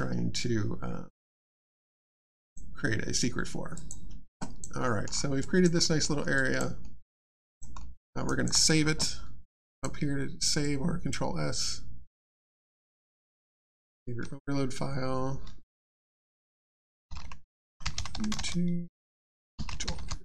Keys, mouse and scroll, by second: 2.4 click, 3.7 click, 4.4 alt+click, 4.8 alt+middle click, 5.4 alt+click, 5.8 alt+middle click, 6.0 alt+scroll down 1, 6.3 alt+click, 6.8 alt+middle click, 7.2 alt+click, 7.8 alt+middle click, 7.9 alt+scroll down 2, 8.2 alt+click, 8.6 alt+scroll down 2, 8.7 ctrl+click, 9.7 click, 17.4-19.1 typing.